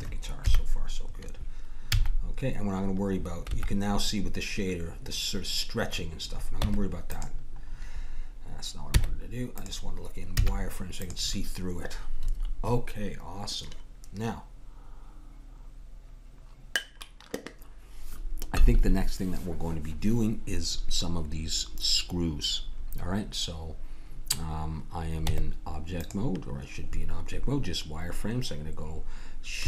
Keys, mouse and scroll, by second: 0.4 KP_1, 1.9 z, 6.6 Tab, 9.0 Tab, 10.3 z, 25.3 Tab.